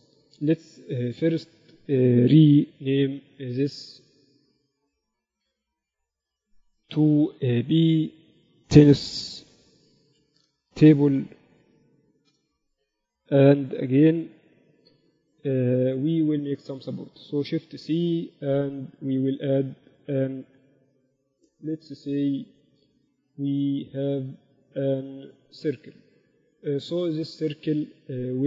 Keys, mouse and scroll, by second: 1.1 Tab, 3.4 ctrl+Up, 5.7 n, 7.2 click, 7.4-10.7 drag, 10.5 n, 14.9 ctrl+Up, 18.1 shift+c, 18.7 shift+a.